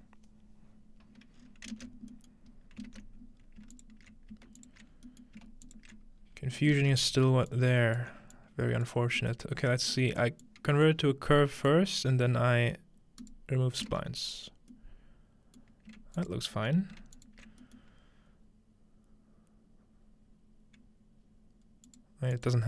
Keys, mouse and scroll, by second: 1.4 scroll up 2, 2.1-2.9 middle drag, 2.5-3.7 scroll up 3, 3.7 alt+shift+click, 4.9 scroll down 2, 6.2-7.0 scroll up 3, 7.0 scroll down 1, 7.5 alt+click, 8.1-15.7 drag, 8.1 middle click, 8.3-8.8 scroll down 1, 9.2 middle click, 9.3 scroll down 1, 15.7-17.1 shift+middle drag, 16.2-17.1 alt+shift+drag, 17.2 alt+shift+click, 17.6 alt+shift+middle click, 20.4 scroll down 1, 21.9-22.6 drag.